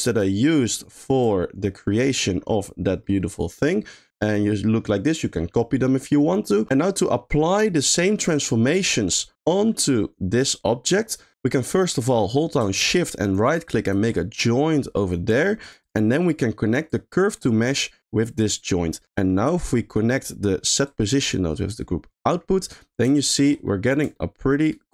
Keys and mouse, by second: 0.2 click, 0.6 click, 2.0 middle click, 3.2 middle click, 6.9 middle click, 7.5 middle click, 8.1 middle click, 8.8 middle click, 10.9 click, 11.5 middle click, 12.4 middle click, 13.3 shift+click, 15.0 middle click, 15.3 g, 15.8 click, 16.9-18.4 drag, 19.0 middle click, 19.3 middle click, 20.1 middle click, 21.1-22.3 drag, 23.1 shift+middle click, 23.6 middle click, 24.2-24.9 shift+middle drag.